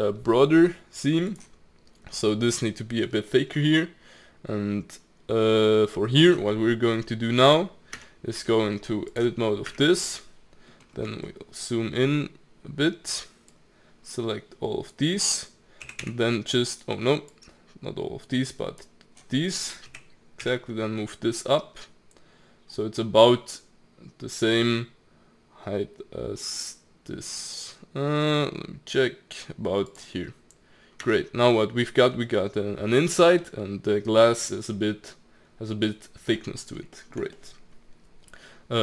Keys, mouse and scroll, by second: 7.9 Tab, 8.4 Tab, 9.1 click, 9.7 Tab, 10.7-11.3 scroll up 3, 11.3-13.5 shift+middle drag, 13.5 click, 15.8 g, 17.3 click, 19.9 g, 31.0 Tab, 31.5-32.8 middle drag, 32.8-33.4 scroll down 3, 33.4-38.8 middle drag.